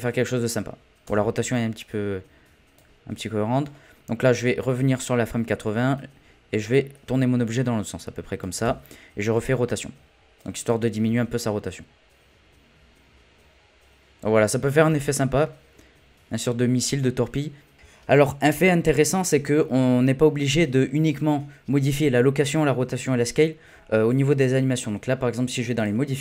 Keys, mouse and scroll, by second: 1.0 space, 1.9-3.7 drag, 3.7-5.9 middle drag, 5.9 click, 8.6 i, 10.4 click, 11.1 space, 14.9 space, 15.4-16.9 middle drag, 16.9-17.7 scroll up 1, 17.7 click, 20.0-21.6 scroll up 1, 21.6-23.1 scroll up 1, 25.8 click.